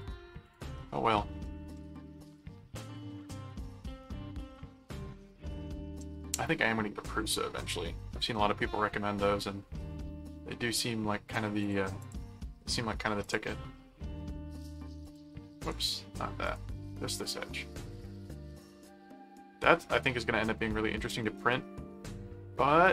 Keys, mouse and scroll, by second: 0.0 click, 1.4 middle click, 2.1-3.5 middle drag, 4.0 middle click, 4.9-6.0 middle drag, 9.2-10.6 middle drag, 11.6 click, 13.2 click, 15.0 click, 16.4 click, 17.1 right click, 18.0-19.3 middle drag, 20.4-21.7 middle drag.